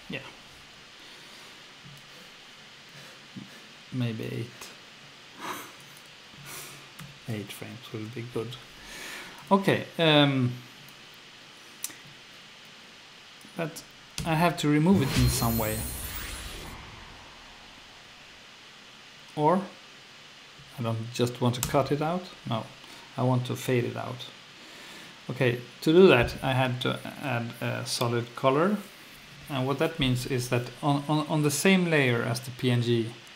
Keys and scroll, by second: 0.5 F1, 7.0 8, 7.9 Return, 14.2 F2, 21.6 F1.